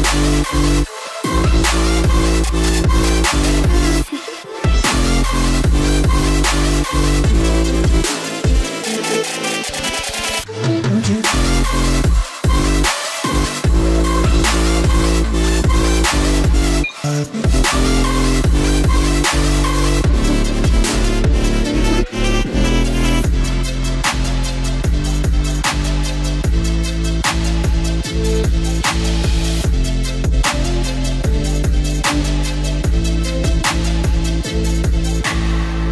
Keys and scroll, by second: 33.8 ctrl+t.